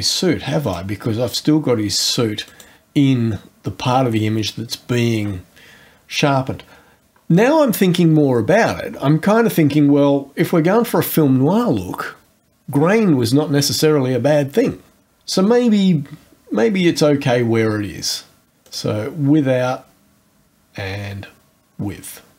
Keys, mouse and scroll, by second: 0.6 click, 2.5 click, 10.1 scroll down 2, 16.8-17.5 scroll up 2, 18.6 click.